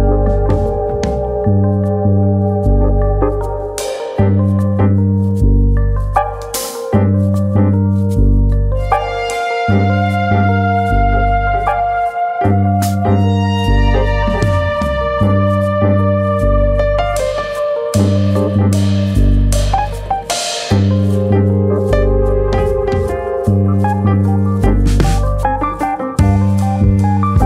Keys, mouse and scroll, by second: 1.3 click, 2.2 ctrl+z, 3.5 middle click, 5.3 g, 6.7 right click, 7.4 click, 8.6 click, 9.0 shift+click, 9.6 click, 10.4 middle click, 10.7 Tab, 11.0 middle click, 11.7 Tab, 12.2 Tab, 13.5 middle click, 14.1 click, 14.8 ctrl+z, 15.5 f, 16.2 click, 16.5 click, 17.6 middle click, 17.8 middle click, 18.0 middle click, 18.4 click, 18.9-19.5 scroll down 2, 19.1 ctrl+z, 19.5 middle click, 21.5 KP_1, 23.1 f, 23.5 click, 24.8 click.